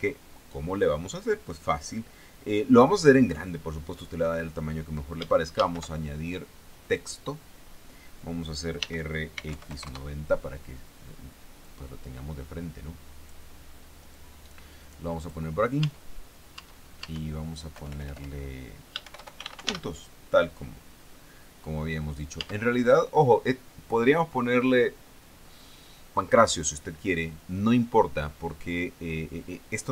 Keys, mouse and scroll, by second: 6.0 shift+a, 7.4 click, 9.2 r, 9.8 x, 10.0 KP_9, 10.2 KP_0, 10.3 KP_Enter, 12.1-13.9 drag, 14.6-15.9 drag, 16.3 Tab, 17.0 Tab, 18.2 BackSpace, 19.5-20.1 typing, 22.8 Tab.